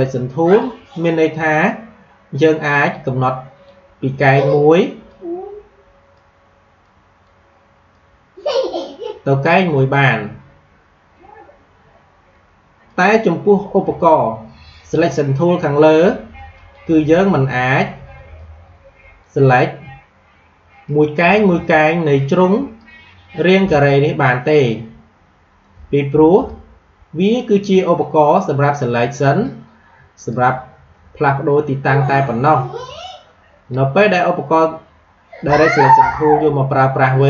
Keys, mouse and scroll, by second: 12.8 click, 16.5-20.7 drag, 21.1-28.5 drag, 30.1 click, 35.3-37.2 drag.